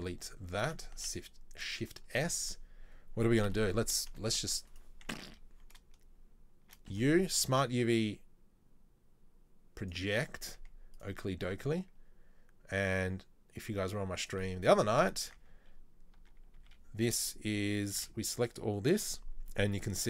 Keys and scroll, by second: 1.1 ctrl+s, 3.6 n, 5.2 Tab, 5.4 a, 6.9 u, 11.6 Tab.